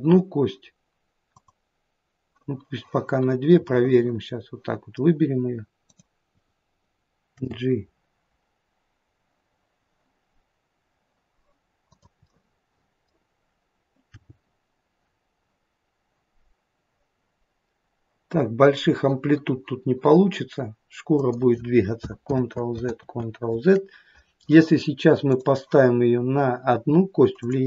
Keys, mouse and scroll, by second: 1.3 click, 3.7 middle click, 4.4 middle click, 5.9 click, 7.3 g, 12.3 middle click, 14.2 middle click, 14.2 g, 22.4 ctrl+z, 23.0 ctrl+z, 25.3 click, 27.4 click.